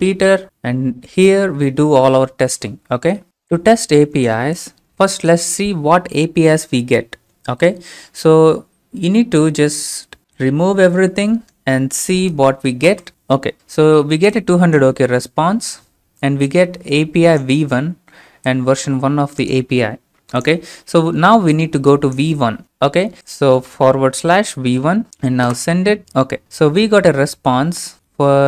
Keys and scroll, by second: 11.8 BackSpace, 12.9 ctrl+space, 22.6 ctrl+c, 24.1 /, 24.7 ctrl+v, 25.5 ctrl+space.